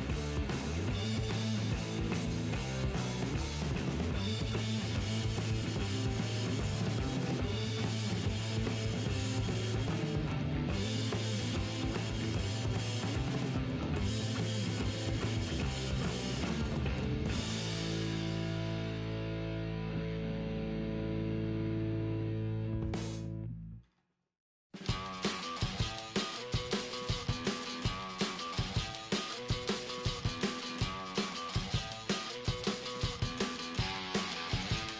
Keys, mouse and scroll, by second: 0.7-2.6 right drag, 1.2 g, 2.2-5.0 middle drag, 2.9-4.5 right drag, 3.3 g, 6.3 g, 7.7-16.5 right drag, 8.3 g, 9.2-11.0 middle drag, 10.1 g, 11.5 g, 12.8 g, 14.3 g, 14.9 g, 16.9-18.0 middle drag, 17.8 right click, 18.5 g, 19.8-21.7 right drag, 20.4 g, 21.9 middle click, 22.1 g, 23.3 middle click, 23.3-25.1 right drag, 23.4 g, 26.0-27.8 middle drag, 26.4 g, 28.9-30.6 right drag, 29.1 g, 30.3-34.9 middle drag, 31.4-33.1 right drag, 32.2 g.